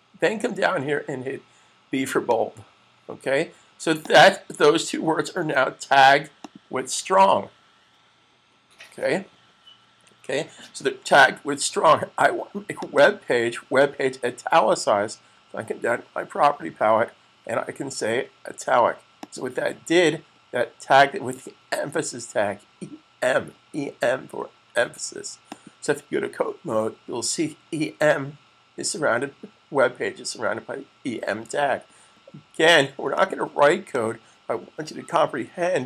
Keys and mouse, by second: 2.1 click, 5.2 super+s, 6.4 click, 12.7 click, 12.9 double click, 19.1 click, 25.3 click, 33.0 click.